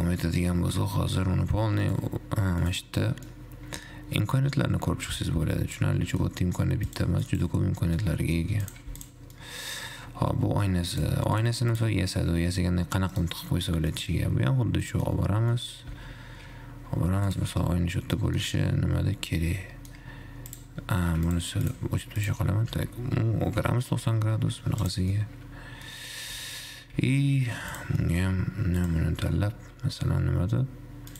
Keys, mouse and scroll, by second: 0.2-0.7 scroll down 5, 0.7-2.0 scroll up 5, 2.0 scroll up 1, 2.3-3.7 drag, 3.7-6.5 middle drag, 7.3-8.3 drag, 8.3-8.9 middle drag, 8.9 click, 9.3 x, 9.8-10.3 middle drag, 10.3-10.7 scroll down 6, 10.7-11.3 scroll up 4, 11.3 click, 12.0 click, 12.8 g, 13.8 middle drag, 13.9-14.3 scroll down 4, 14.3-16.2 middle drag, 16.2 g, 17.8 `, 18.4-20.7 middle drag, 20.7 click, 21.4 x, 21.9 click, 22.4 click, 22.8 r, 25.3-26.4 middle drag, 26.4 g, 28.2-28.8 middle drag, 28.8-29.2 scroll down 2, 29.2 shift+click.